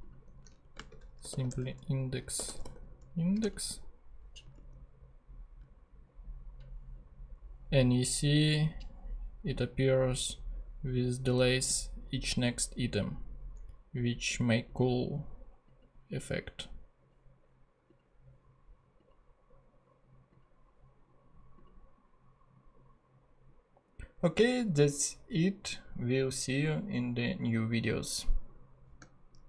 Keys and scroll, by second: 0.6 Left, 0.7-3.1 typing, 3.4 Return, 4.4 super+Return.